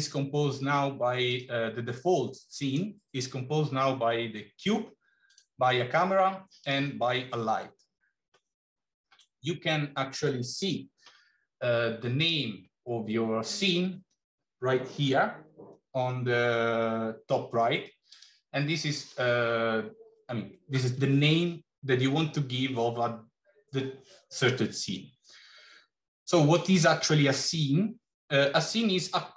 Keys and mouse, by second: 1.2 click, 6.5 click, 12.2 click, 18.0-26.6 drag.